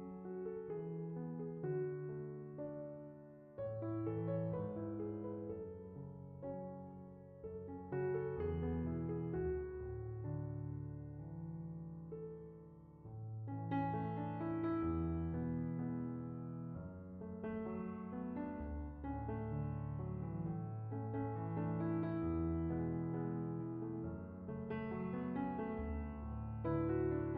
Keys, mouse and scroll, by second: 1.3 scroll down 10, 3.6 click, 4.9 click, 10.1-13.4 drag, 14.1-15.1 drag, 22.8 click, 27.1-27.3 drag.